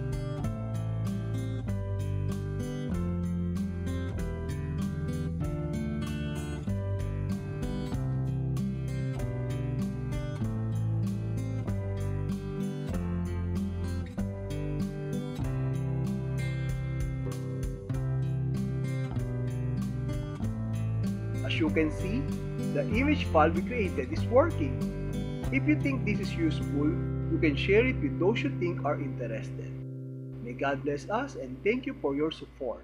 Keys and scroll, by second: 2.0 alt+t, 4.0 Down, 4.6 Down, 7.1 Return, 9.1 Tab, 11.1 space, 14.1 super+e, 16.1 shift+Tab, 18.1 c, 19.9 Return.